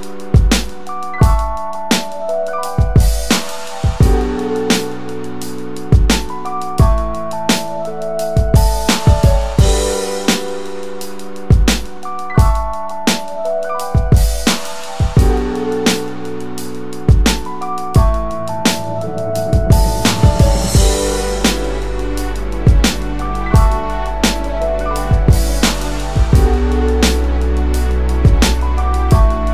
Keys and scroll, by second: 0.4 3, 0.9 Return, 11.7 typing, 13.6 space, 18.1 Tab, 20.1 4, 24.6 ctrl+space, 25.5 ctrl+space.